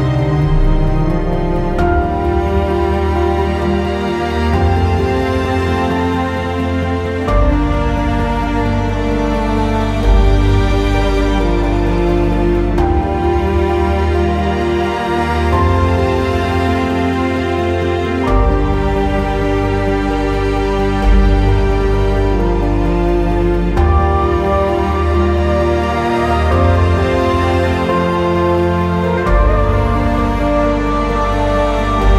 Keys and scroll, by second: 13.7 ctrl+z, 14.8 p, 18.8 ctrl+g, 27.0-28.0 typing.